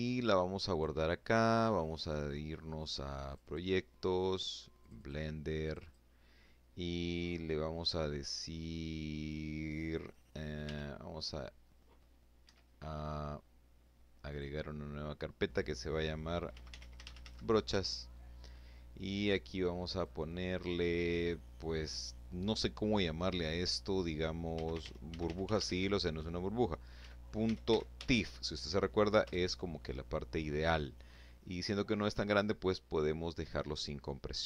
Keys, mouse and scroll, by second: 1.7 click, 3.2 click, 4.0 click, 5.7-6.8 scroll down 2, 7.1-7.9 scroll up 4, 9.0 i, 10.8 Escape, 12.7 click, 14.7-16.1 typing, 18.4 click, 22.7-26.9 typing, 27.7 Return, 32.9 click.